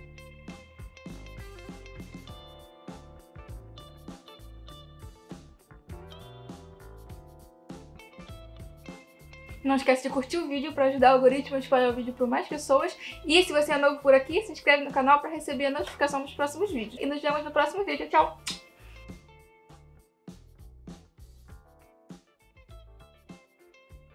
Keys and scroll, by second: 2.7 \, 3.4 \, 6.4 \, 7.4 \, 8.1 \, 8.4 \, 8.9 i, 14.8 \, 16.2 \, 16.8 \.